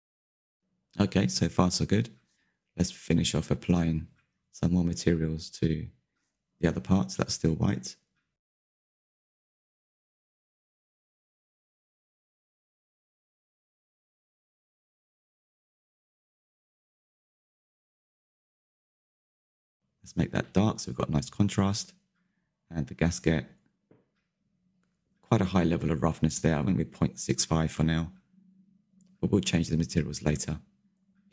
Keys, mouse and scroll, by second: 0.0-0.5 shift+middle drag, 0.5 scroll down 2, 0.6-2.6 shift+middle drag, 2.6 click, 3.5 middle click, 3.7 scroll up 4, 3.8 shift+middle click, 4.0 click, 4.9-5.4 drag, 5.6 shift+middle click, 6.4 click, 6.7 scroll down 3, 6.9-8.2 shift+middle drag, 8.2 click, 8.7 click, 9.2 scroll down 2, 9.4-10.7 shift+middle drag, 10.7 scroll up 3, 10.8 shift+middle click, 11.5 click, 11.6-14.0 shift+middle drag, 14.0 click, 14.3-15.9 middle drag, 15.9 click, 16.7 click, 17.4 scroll down 3, 17.6 shift+middle click, 18.1 scroll up 4, 18.3 shift+middle click, 18.6 ctrl+s, 19.0 scroll up 2, 19.3 click, 19.5 click, 19.7 middle click, 20.1 click, 20.8 scroll down 1, 21.0 middle click, 21.3-22.7 drag, 25.1 click, 26.7 click, 26.8-27.5 middle drag, 27.5 scroll down 5, 27.7-30.0 shift+middle drag, 30.0-31.1 scroll up 9, 30.3 shift+middle drag, 30.8 middle click, 31.1 shift+middle drag.